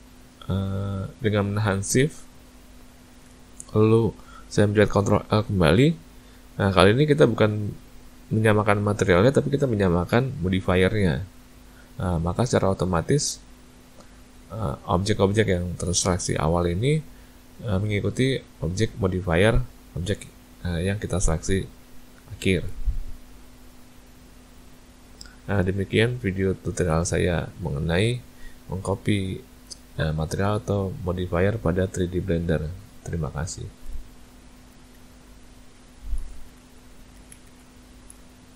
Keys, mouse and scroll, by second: 5.3 ctrl+l, 23.3 a, 23.6 a.